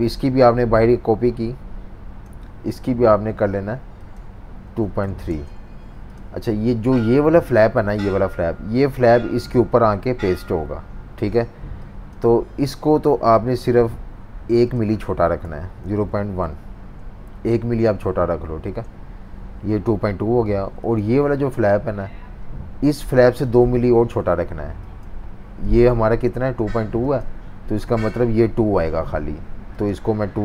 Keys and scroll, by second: 4.4-5.5 typing, 15.2-16.9 typing, 18.6 Return.